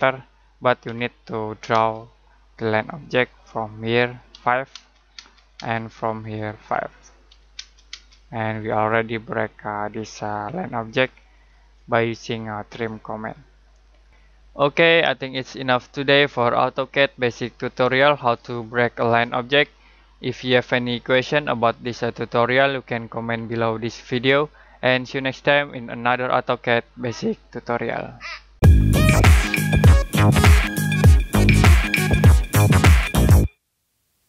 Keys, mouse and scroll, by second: 0.8 l, 1.7 space, 2.8 click, 4.3 5, 4.7 space, 6.2 click, 7.2 5, 7.5 space, 8.3 click, 12.6 Escape, 14.1 middle click.